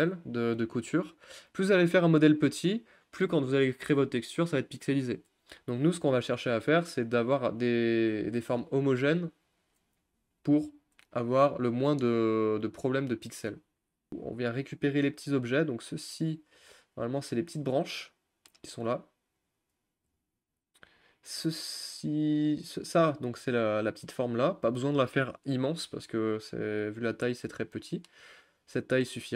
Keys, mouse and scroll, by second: 0.1 click, 1.2 click, 8.1-8.6 scroll down 5, 8.6-9.4 scroll up 2, 11.4 click, 14.1 g, 15.7-16.7 shift+middle drag, 16.7-17.9 scroll up 2, 19.5 click, 20.4 s, 23.2-24.5 middle drag, 24.5 ctrl+z, 27.4 g.